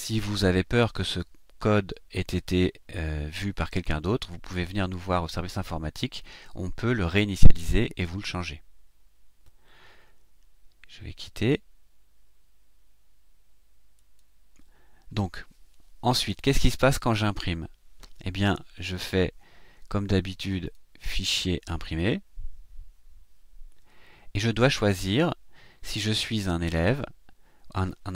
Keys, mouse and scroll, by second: 13.9 click, 20.6 click, 21.8 click, 26.7 click.